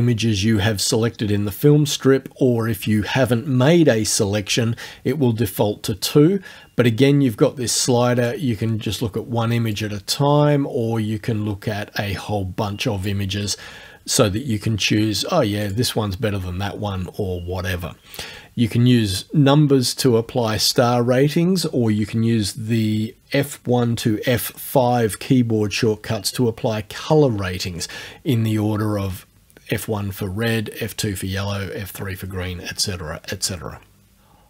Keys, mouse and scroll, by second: 7.8 click, 9.7-13.2 drag, 15.7 click.